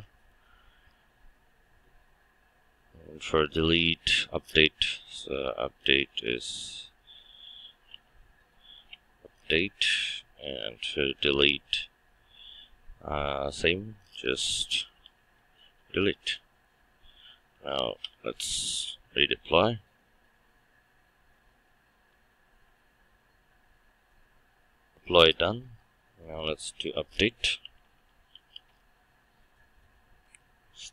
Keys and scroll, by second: 8.8 Return, 15.7 Return, 17.9 shift+F9.